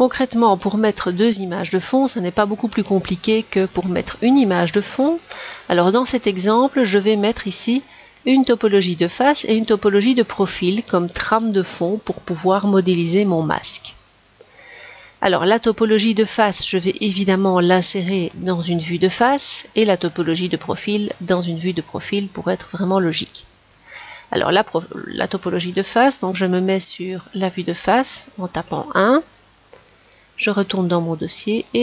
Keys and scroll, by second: 26.6 1.